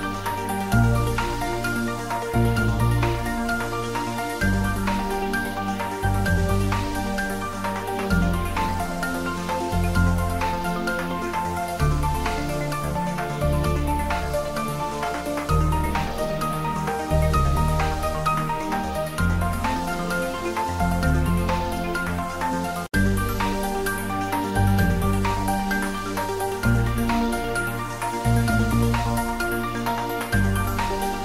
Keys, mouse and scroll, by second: 1.4 ctrl+s, 2.9 click, 4.5 click, 6.7 click, 7.9 3, 8.2 click, 9.1 ctrl+middle click, 9.6 shift+middle click, 9.9 middle click, 10.4 ctrl+middle click, 11.2 middle click, 11.6 click, 12.7 Tab, 14.2 click, 14.9 shift+z, 15.3-16.6 drag, 16.6-18.4 drag, 18.4 middle click, 19.3 click, 19.8 shift+z, 20.6 click, 21.6-23.4 drag, 23.4 shift+z, 23.9-25.6 drag, 26.2 shift+click, 27.0 ctrl+z, 27.3 shift+click, 27.7 1, 28.8 2, 28.8 shift+click, 29.8 shift+click, 30.7 shift+click.